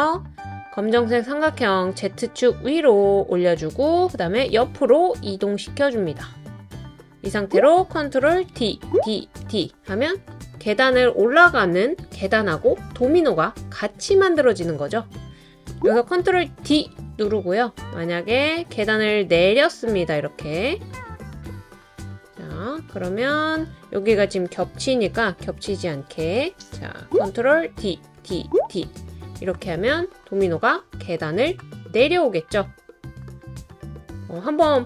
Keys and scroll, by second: 8.5 super+d, 9.0 super+d, 9.4 super+d, 16.4 super+d, 25.1 Right, 25.3 Right, 26.2 Right, 27.7 super+d, 28.2 super+d, 28.6 super+d.